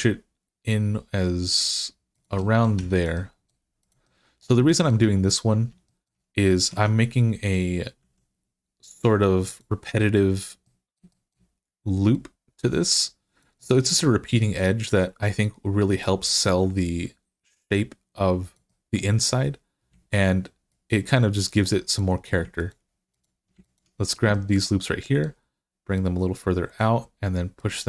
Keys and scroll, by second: 2.6 Tab, 6.5 Tab, 7.8 s.